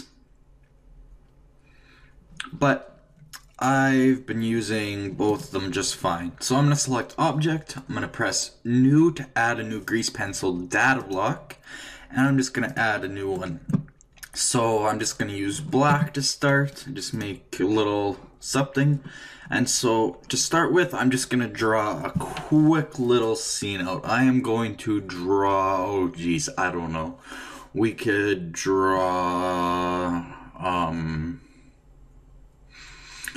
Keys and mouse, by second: 7.0 click, 11.0-14.6 drag, 17.1-18.5 drag, 18.7-22.1 middle drag.